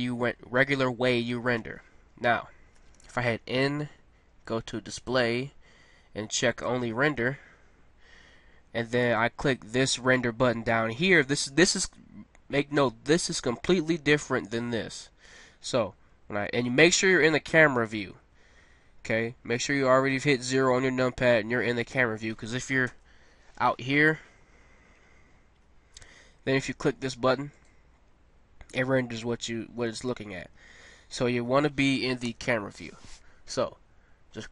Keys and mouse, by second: 0.0 Escape, 2.7 n, 4.3 middle click, 4.9-8.2 drag, 22.8 KP_0, 24.3 middle click, 30.4 Escape, 32.3 KP_0, 34.3 click.